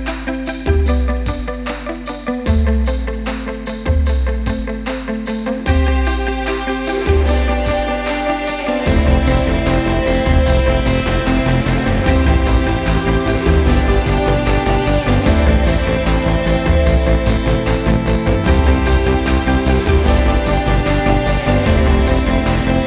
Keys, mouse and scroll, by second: 2.1 click, 2.9 click, 3.4 click, 4.4 ctrl+scroll down 1, 5.0 ctrl+scroll down 2, 8.2 click, 10.4 click, 12.4 right click, 13.6 click, 15.3-16.6 drag, 17.0 click, 18.0-18.4 drag, 18.7-19.5 drag, 19.3 right click, 20.2 click, 20.9 right click, 21.9 click.